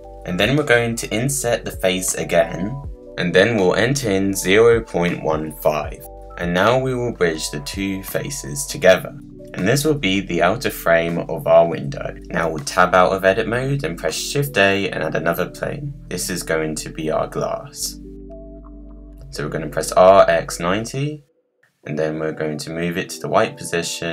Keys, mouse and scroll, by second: 0.0 BackSpace, 0.2-0.7 scroll down 1, 0.7 middle click, 3.6-5.8 drag, 6.2 middle click, 7.0 scroll down 1, 7.1-7.6 scroll up 2, 7.6-9.9 right drag, 9.9 click, 10.4-12.1 middle drag, 12.1 Tab, 12.6 click, 13.6 shift+a, 15.4-15.9 scroll down 4, 16.9 g, 18.2 r, 21.0 g, 22.4-22.9 scroll up 7, 22.9-23.3 scroll down 2, 23.3 middle click, 24.0 Tab.